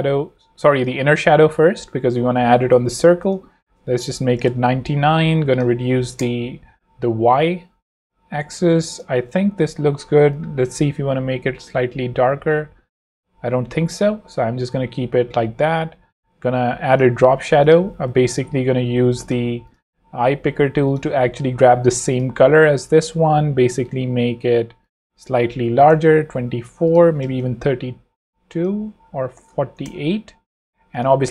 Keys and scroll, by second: 0.3 super+z, 4.0 9, 4.4 Return, 6.0 0, 6.1 Return, 14.0 Escape, 17.4 z, 25.4-27.1 typing, 27.2 Return, 29.3 4, 29.5 8, 29.8 Return.